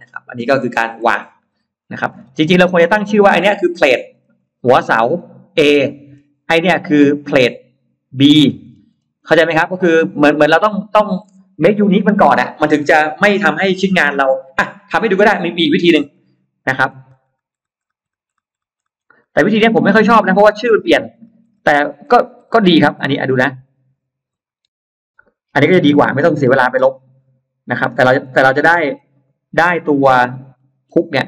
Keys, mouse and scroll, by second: 0.6-1.1 scroll down 4, 1.3-1.9 scroll up 4, 1.9-2.3 scroll down 2, 2.6-3.0 scroll up 2, 3.2-3.5 scroll down 2, 3.7-4.9 scroll up 2, 5.7-6.3 scroll down 2, 6.5-7.9 scroll up 3, 8.3-9.7 scroll down 5, 15.3-15.6 scroll up 2, 16.6 ctrl+z, 17.3 ctrl+z, 17.7 ctrl+z, 18.3 ctrl+z, 19.1 ctrl+z, 19.6 ctrl+z, 20.2 ctrl+z, 20.7 ctrl+z, 21.4 ctrl+z, 22.2 ctrl+z, 22.9 middle click, 24.5 ctrl+y, 24.7 ctrl+y, 25.9 ctrl+y, 26.5 ctrl+y, 26.9 ctrl+y, 27.3 ctrl+y, 29.5-29.8 scroll up 2, 29.9-30.3 scroll down 2, 30.4 middle click.